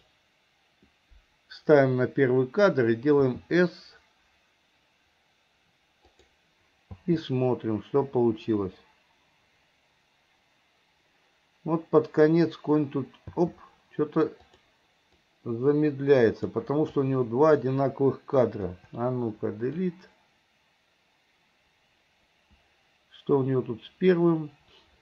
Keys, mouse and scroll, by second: 0.0 click, 3.2 s, 7.1 space, 13.3 space, 14.6 click, 15.3-16.7 drag, 17.0-17.7 drag, 18.7 Delete, 19.9-25.0 drag.